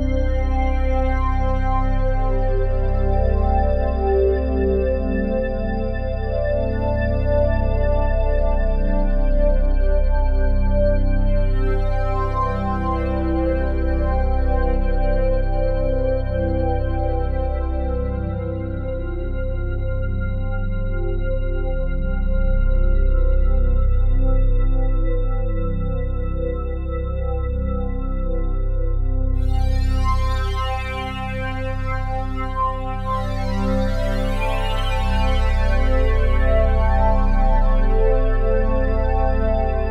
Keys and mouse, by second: 0.0 1, 0.9 click, 2.1-2.6 drag, 2.7 click, 4.0-4.5 typing, 5.7 click, 7.3 click, 7.9 click, 10.6-15.9 drag, 16.8 click, 18.9 Left, 19.0 Left, 21.2 click, 22.3 Right, 22.5-24.4 Right, 24.4 click, 26.9-31.6 drag, 30.1 typing, 31.6 typing, 33.7-34.9 drag, 34.9 typing, 35.0-38.6 drag, 38.6-39.1 typing.